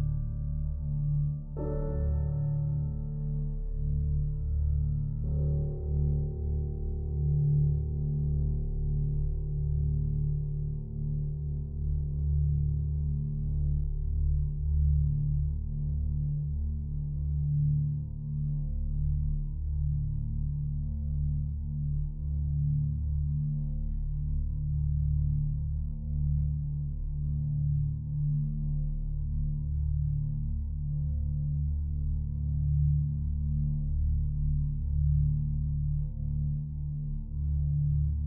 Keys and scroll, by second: 10.8 ctrl+l, 36.5 ctrl+t.